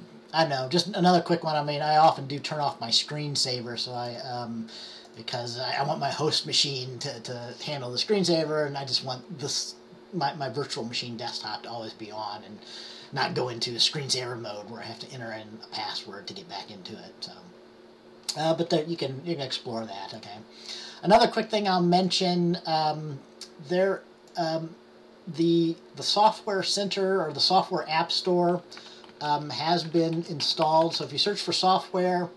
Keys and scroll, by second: 28.9-31.5 typing.